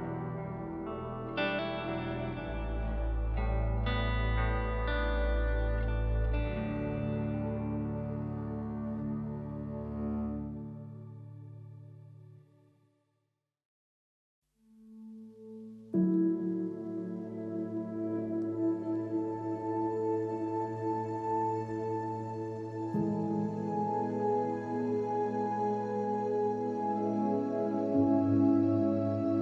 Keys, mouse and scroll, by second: 0.2 middle click, 0.7 middle click, 1.4 middle click, 2.1 middle click, 3.2 middle click, 4.9 shift+a, 6.7 middle click, 7.2 middle click, 8.0 middle click, 8.4 alt+s, 10.3 click, 10.4 shift+d, 10.5 click, 10.6 click, 10.9 alt+s, 11.1 alt+click, 11.7 click, 12.2 middle click, 12.6 shift+middle click, 13.2 click, 13.5-15.6 shift+middle drag, 16.1-17.6 shift+middle drag, 18.0 middle click, 18.5 middle click, 19.5 middle click, 19.7 click, 20.2 ctrl+s, 20.3 click, 20.9 n, 21.4 click, 21.6 click, 22.1 drag, 22.4 click, 22.6 click, 23.0-23.4 drag, 24.2 click, 25.4 click, 25.6 click, 25.7 alt+s, 26.0 shift+a, 27.0 click, 27.5 ctrl+h, 27.6 g, 27.8 click, 28.0 ctrl+s, 28.6 click, 28.8 shift+click, 28.9 g, 29.2 click, 29.3 ctrl+s.